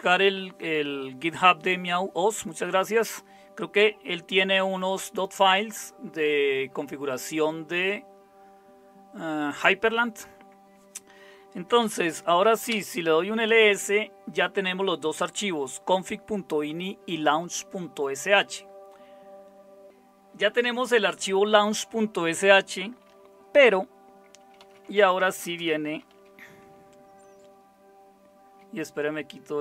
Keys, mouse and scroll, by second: 11.6-12.7 typing, 24.3-26.6 typing.